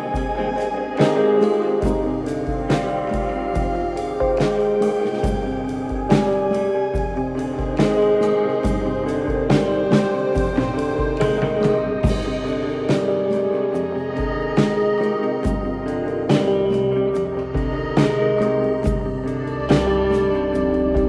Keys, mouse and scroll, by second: 0.0 Tab, 0.7 click, 1.4 click, 3.0 ctrl+KP_3, 3.9 click, 5.3 click, 7.3 Tab, 7.8 click, 9.2 click, 9.8 click, 10.5 click, 11.2 click, 13.3 click, 15.8 ctrl+KP_3, 16.4-17.0 scroll up 1, 17.6 e, 19.2 ctrl+z.